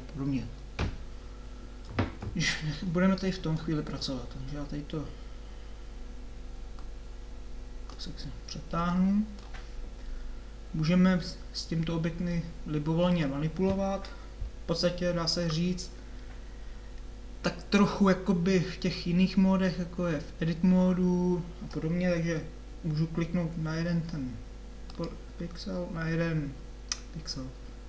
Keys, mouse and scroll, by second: 24.9 middle click.